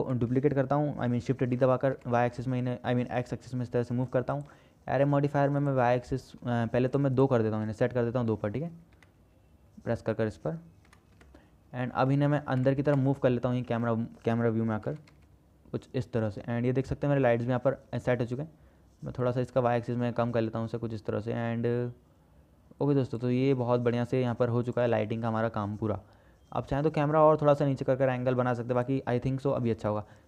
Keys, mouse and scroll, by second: 1.6 shift+d, 6.0 middle click, 7.3-10.1 middle drag, 9.2 KP_2, 10.2-11.8 middle drag, 12.4 shift+middle click, 13.1 KP_0, 14.1 shift+middle click, 15.1 g, 19.5-21.0 drag, 21.0-22.3 shift+middle drag, 24.1 ctrl+s, 25.0 middle click, 29.9 shift+drag.